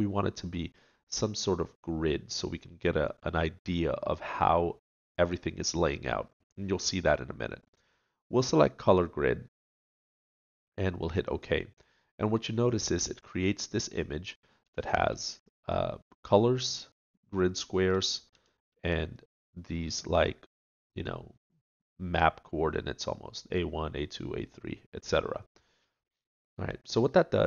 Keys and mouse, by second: 27.1 middle click.